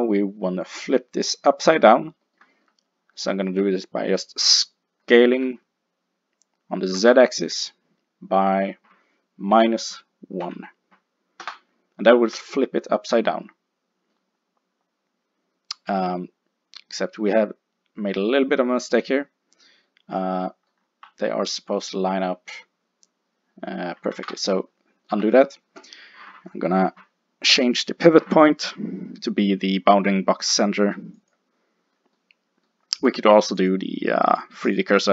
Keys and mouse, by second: 2.3-7.2 middle drag, 5.5 s, 12.1-14.6 middle drag, 15.2-17.2 middle drag, 19.0 middle click, 21.8 middle click, 24.2 ctrl+z, 27.1 middle click, 27.5 click, 32.2-33.6 middle drag, 33.6 click.